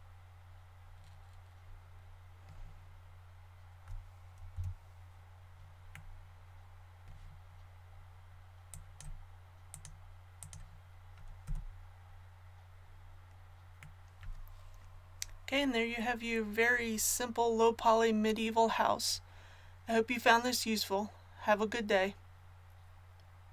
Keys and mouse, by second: 4.5 l, 8.7-12.2 drag, 11.4 a.